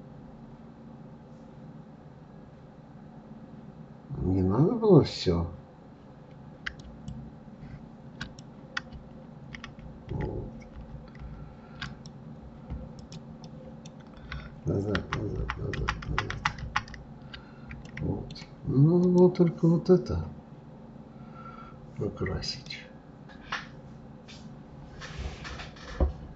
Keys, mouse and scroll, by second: 6.8 click, 8.2-9.6 drag, 9.6 ctrl+z, 10.1 ctrl+z, 11.8-13.4 drag, 13.4-14.9 middle drag, 14.9 ctrl+z, 15.4 ctrl+z, 17.9-19.0 middle drag, 19.0 click, 22.6-25.7 middle drag.